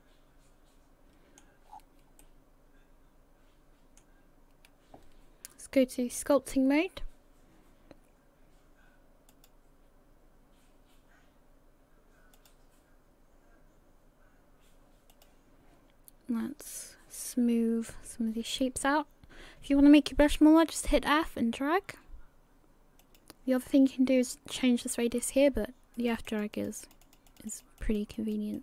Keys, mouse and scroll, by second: 1.7 scroll down 6, 2.2 middle click.